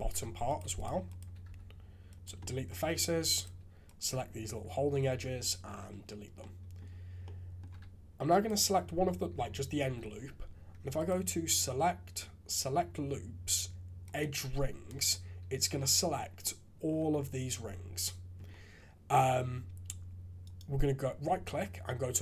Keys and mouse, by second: 0.1 3, 0.5 click, 0.7 shift+click, 1.0 shift+click, 1.4 x, 2.4 click, 2.8-3.2 typing, 3.3 alt+click, 5.1 ctrl+x, 6.4 click, 7.2 click, 9.4 shift+z, 9.8 shift+z, 11.0-12.4 drag, 12.4 middle click, 12.9-14.2 drag, 16.4 click, 20.6-22.2 drag.